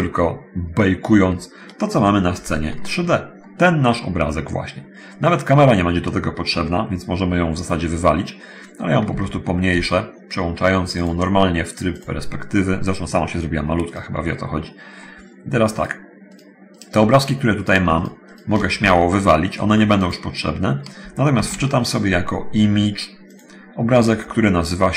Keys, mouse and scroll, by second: 2.6 shift+F5, 3.2-4.8 middle drag, 5.0-5.6 scroll down 1, 9.2 s, 9.9 Escape, 10.8 click, 12.2 click, 13.8 right click, 14.4 middle click, 16.0 right click, 16.5 right click, 17.1 right click, 17.8 right click, 18.2 shift+right click, 19.0 shift+x, 19.8 click, 23.5 click.